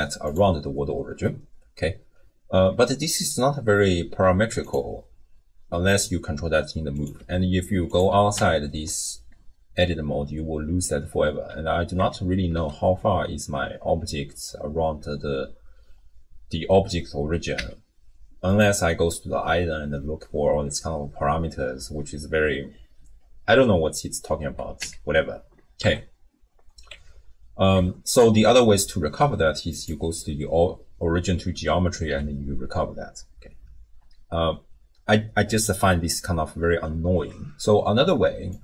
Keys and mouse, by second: 4.6 click, 7.0 click, 7.9 click, 8.4 Tab, 12.0 Tab, 12.5 a, 17.6 n, 18.5 click, 24.8 n, 25.8 Tab, 26.9 Tab, 27.7 Tab, 28.2-29.9 drag, 32.0 alt+g.